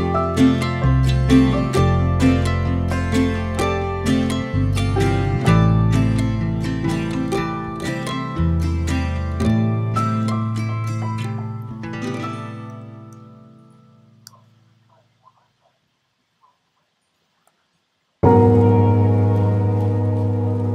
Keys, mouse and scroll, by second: 0.5-1.0 shift+right drag, 1.0-1.8 middle drag, 1.8-2.5 scroll up 2, 2.5 shift+a, 4.3 shift+a, 5.1 s, 8.1 middle click, 8.2 z, 8.3 click, 11.0 Tab, 12.0 3, 12.2 click, 12.7-14.3 middle drag, 19.1 click, 19.9 middle click.